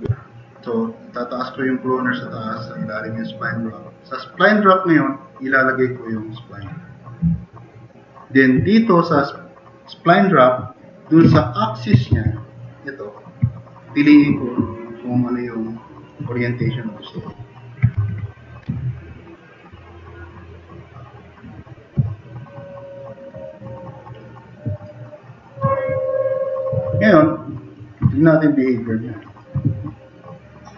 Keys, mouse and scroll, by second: 18.1 super+-, 22.2-22.9 drag, 24.1-24.5 middle drag, 24.5 drag, 28.1 middle drag, 30.1-30.7 drag.